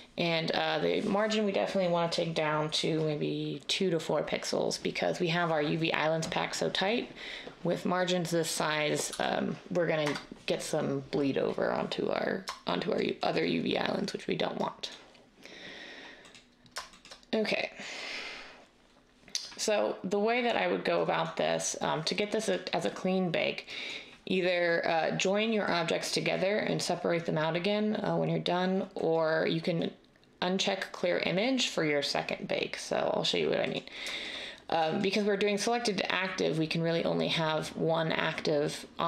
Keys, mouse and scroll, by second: 9.1 typing, 10.0 Return.